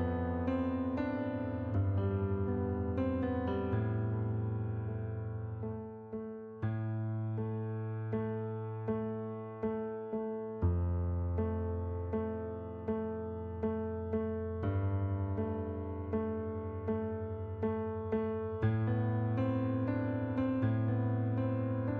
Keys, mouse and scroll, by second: 0.1 click, 0.5 right click, 1.8 click, 3.0 click, 3.8 click, 4.2 right click, 5.4 middle click, 6.4 click, 7.5 click, 8.8 click, 10.9 click, 11.9 click, 13.1 click, 13.9 KP_7, 14.1 Return, 15.2 click, 16.0 KP_8, 16.2 Return, 17.4 middle click, 18.4 shift+click, 20.8 right click.